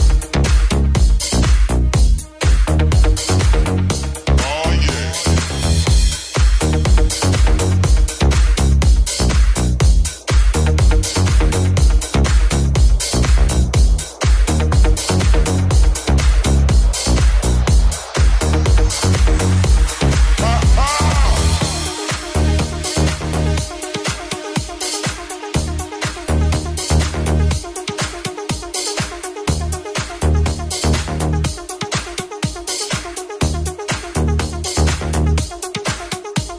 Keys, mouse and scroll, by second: 6.6 g, 6.9 r, 9.3 g, 14.6 g, 17.4 right click, 17.7 shift+click, 17.8 shift+middle click, 18.0 shift+click, 18.0 shift+middle click, 18.2 shift+click, 18.3 shift+middle click, 19.7-33.3 middle drag, 19.7 w, 20.7 e, 24.0 g, 27.6 ctrl+z, 33.4 shift+middle click, 34.2-36.3 middle drag.